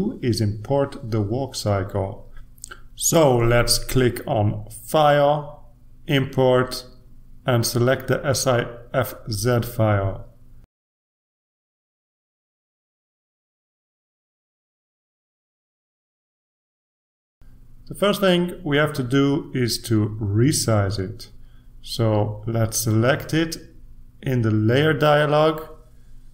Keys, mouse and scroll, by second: 1.9 click, 5.9 click, 8.1 click, 10.3 click, 13.0 click, 18.7 click, 21.9-26.3 drag.